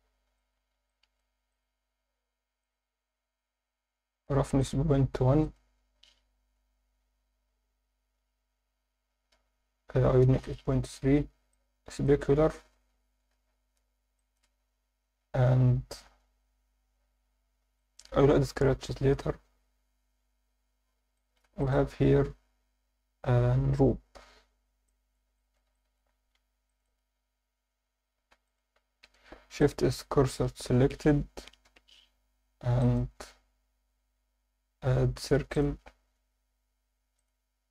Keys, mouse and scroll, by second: 0.2 scroll down 2, 0.4 alt+shift+middle drag, 0.9-1.2 ctrl+alt+middle drag, 1.5 click, 2.6 click, 3.2 scroll down 2, 3.9-4.6 scroll down 2, 4.6 click, 5.4-10.1 drag, 11.5 click, 13.2 scroll down 2, 13.7 scroll down 1, 14.2 alt+shift+middle drag, 17.0 scroll down 1, 17.7 alt+shift+middle drag, 21.2 alt+shift+middle drag, 21.6 click, 24.5 Tab, 24.9 alt+middle click, 25.4 alt+shift+middle click, 25.7 ctrl+alt+middle click, 26.4 1, 26.7 click, 28.3 3, 28.4 click, 29.0 shift+s, 29.9 Tab, 30.7 KP_7, 31.7 KP_1, 32.4-32.8 scroll down 2, 32.8 alt+shift+middle drag, 33.2-33.7 scroll up 1, 33.9 shift+a, 37.2 click.